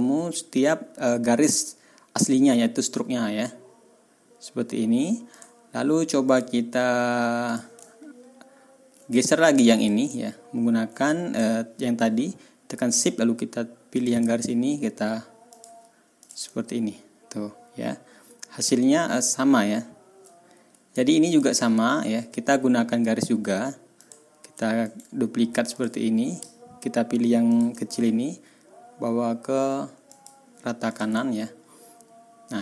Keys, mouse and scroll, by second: 5.3 click, 6.2 click, 7.4 click, 7.8-8.7 ctrl+scroll down 1, 9.2 ctrl+click, 9.7 click, 10.4-10.8 ctrl+scroll up 2, 11.4 ctrl+scroll down 2, 13.9 shift+click, 15.5 click, 16.2 ctrl+click, 16.5-17.4 ctrl+scroll up 4, 17.5 ctrl+scroll down 1, 18.0 ctrl+scroll up 1, 18.8-20.0 ctrl+scroll down 3, 21.3 ctrl+middle click, 21.6 ctrl+scroll up 2, 22.3-23.1 ctrl+scroll down 4, 23.6 ctrl+scroll up 1, 23.9 click, 24.8 right click, 25.7 click, 27.5 shift+click, 30.1 click, 30.9 ctrl+click, 31.2-32.2 ctrl+scroll up 6, 32.4-32.6 ctrl+scroll down 2.